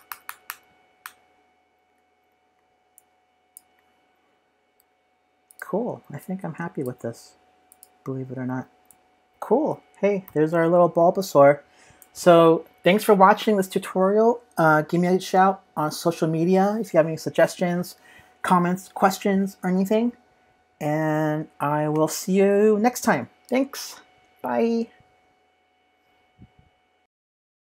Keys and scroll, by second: 9.3 super+-, 9.3 super+=, 9.3 super+s, 10.2 v, 11.0 space, 11.5 space.